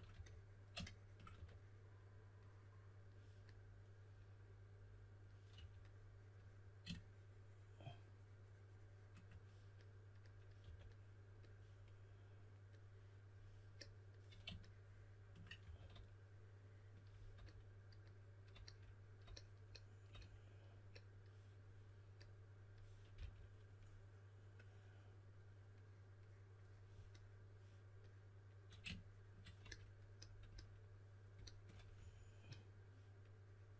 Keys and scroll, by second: 0.0 3, 1.3 4, 5.2-6.0 typing, 10.6 4, 15.6 4, 23.1 s, 31.9 5.